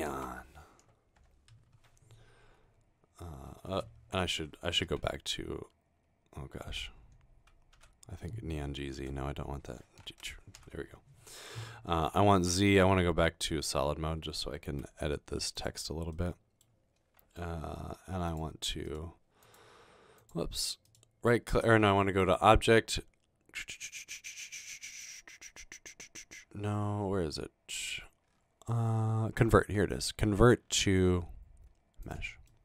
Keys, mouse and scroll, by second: 0.0-3.2 typing, 1.2 Return, 5.0 typing, 7.0-8.0 typing, 7.8 Tab, 8.9 Tab, 10.0 BackSpace, 10.2 BackSpace, 10.6 Tab, 12.0 z, 14.7 g, 17.5 typing.